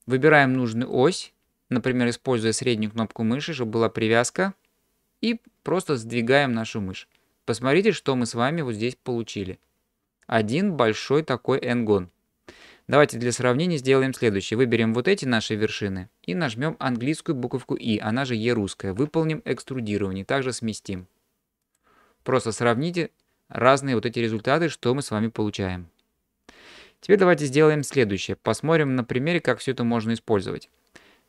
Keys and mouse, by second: 14.5 click, 19.0 e, 27.8 shift+middle click, 28.9-30.7 middle drag.